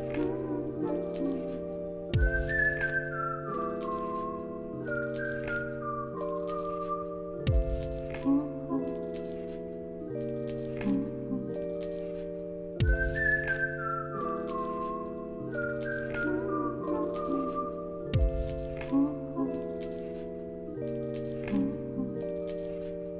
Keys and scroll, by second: 4.7 space.